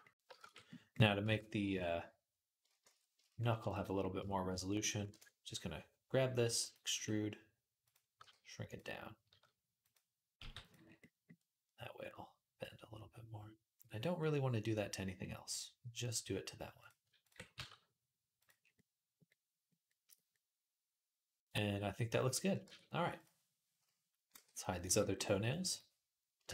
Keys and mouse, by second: 0.2 shift+Tab, 1.1 Tab, 1.5 Tab, 2.6 shift+Tab, 5.0-11.0 drag, 6.3 e, 6.7 s, 8.0 g, 9.1 s, 10.2 g, 11.0-16.6 middle drag, 16.6 click, 16.7-23.0 ctrl+middle drag, 17.4 g, 22.5 Tab, 23.0 click, 23.1-24.6 middle drag, 24.2 h, 24.6 click, 24.7-26.5 middle drag, 24.7 h.